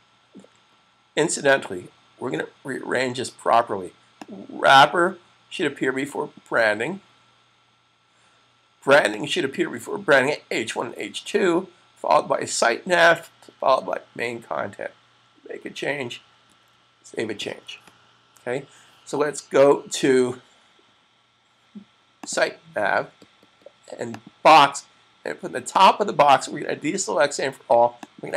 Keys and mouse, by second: 4.1 click, 9.0 click, 16.3 super+s, 22.1 click, 22.3 double click, 23.9 click, 28.0 click.